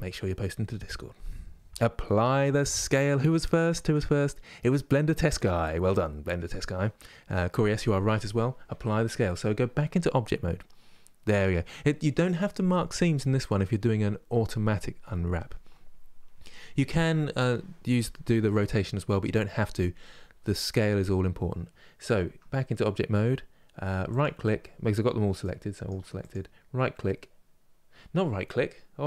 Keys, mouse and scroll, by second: 21.9 Tab, 25.5 click.